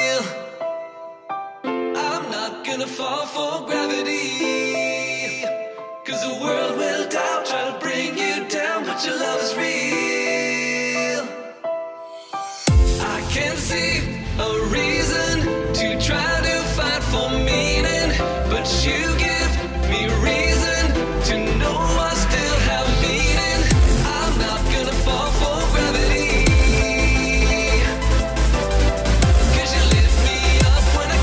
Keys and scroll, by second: 6.1 space, 6.5 -, 8.4 z, 8.6 space, 8.8 -, 9.9 space, 10.4 -, 11.5 +, 11.9 -, 17.1 -, 17.6 space.